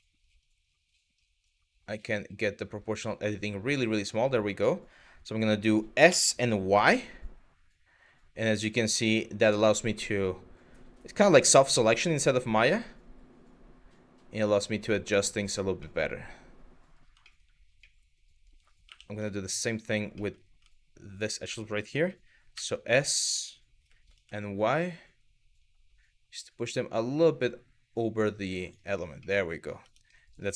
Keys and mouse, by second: 5.7 s, 6.4 y, 15.1 click, 15.6-16.6 middle drag, 17.0 shift+middle click, 17.6 middle click, 18.5 2, 19.9 middle click, 20.8 click, 21.1 middle click, 22.2 s, 23.8 y, 28.3 click, 28.9 middle click, 29.4 Tab, 29.8 middle click.